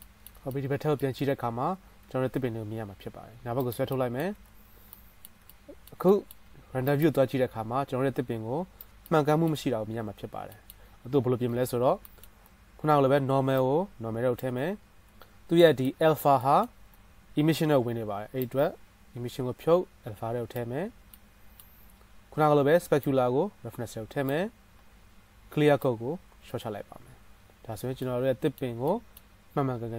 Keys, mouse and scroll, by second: 2.1-3.9 drag, 2.1-4.6 right drag, 2.1 g, 4.6-5.1 drag, 5.1-9.5 shift+middle drag, 6.6 z, 9.5-13.8 right drag, 13.8-19.0 middle drag, 19.0-21.5 drag, 21.5-24.3 middle drag, 27.4-29.9 middle drag.